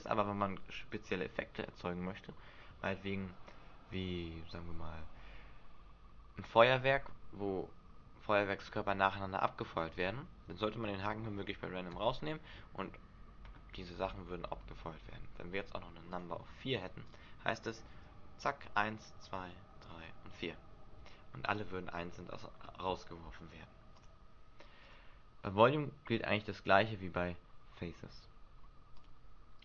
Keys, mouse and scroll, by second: 9.9 click, 11.9 alt+a, 14.7 Escape, 16.1 click, 17.9 alt+a, 21.8 Escape, 24.0 click, 24.8 click, 28.9 click.